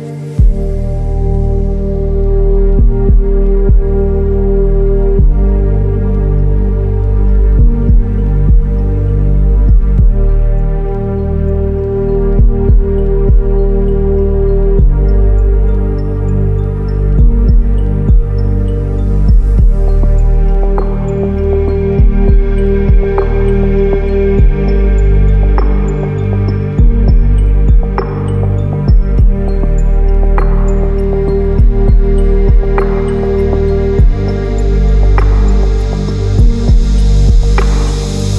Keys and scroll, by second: 10.4 ctrl+t.